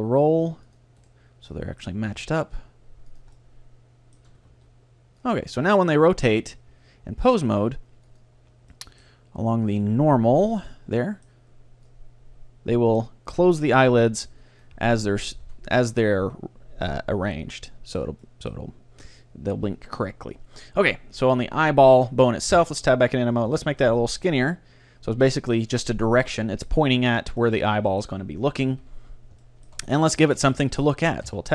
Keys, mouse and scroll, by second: 1.0-3.0 right drag, 1.6-5.3 middle drag, 2.2 ctrl+r, 3.4-5.3 drag, 4.6 ctrl+r, 5.5-7.1 drag, 5.6-7.3 middle drag, 6.4 Tab, 8.1-11.6 drag, 8.8-10.6 middle drag, 11.0-12.9 middle drag, 11.9-13.7 drag, 15.0 ctrl+z, 15.5 a, 17.3-18.5 middle drag, 20.4 middle click, 21.3-23.1 right drag, 22.6 Tab, 23.5 ctrl+alt+s, 25.8-27.8 drag, 26.4-28.1 middle drag, 26.4-27.8 right drag, 27.1 Tab, 28.8 KP_3, 31.3 Tab.